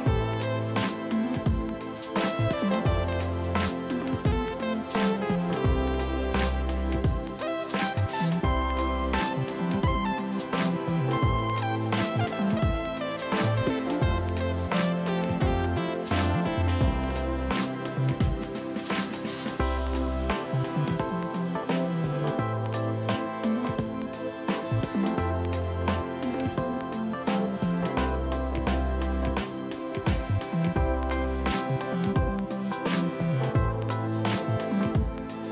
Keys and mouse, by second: 0.4 right click, 0.7 click, 1.3 alt+y, 1.4 click, 2.5 right click, 2.8 click, 4.6 alt+y, 4.7 click, 5.9 alt+y, 6.1 click, 7.4 alt+y, 7.6 click, 7.8 click, 8.8 y, 9.3 alt+y, 9.7 click, 10.1 alt+y, 10.6 click, 11.5 Delete, 12.4 click, 12.9 click, 13.6 ctrl+1, 14.8 click, 14.9 alt+y, 15.0 click, 16.5 y, 17.5 click, 17.8 ctrl+shift+x, 17.9 click, 18.2 Escape, 18.7 ctrl+1, 18.7 Escape, 18.9 ctrl+shift+x, 19.0 Escape, 19.1 click, 19.5 Escape, 19.8 click, 20.9 Escape, 21.1 ctrl+1, 23.0 click, 24.9 ctrl+click, 25.7 ctrl+shift+x, 25.8 click, 26.5 ctrl+1, 26.5 click, 27.4 ctrl+1, 28.5 click, 28.6 right click, 28.8 click, 35.1 1, 35.2 click.